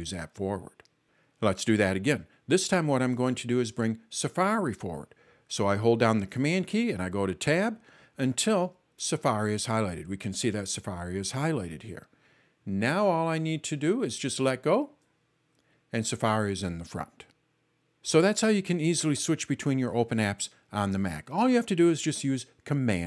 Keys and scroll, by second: 7.4 super+Tab, 8.6 super+Tab.